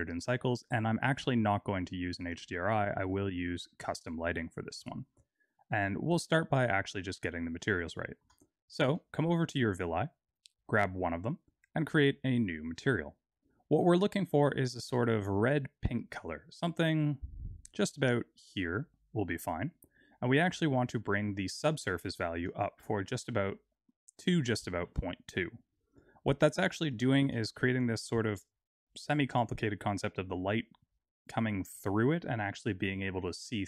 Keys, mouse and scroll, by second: 6.0 middle click, 6.5-7.1 scroll down 2, 7.1 middle click, 7.1 scroll down 3, 8.0 shift+middle click, 8.4-8.9 scroll down 4, 9.0 shift+middle click, 10.2 click, 11.7 click, 12.7 click, 13.9 click, 22.3 click, 25.8 click, 26.3-26.9 scroll up 2, 27.0 shift+middle click.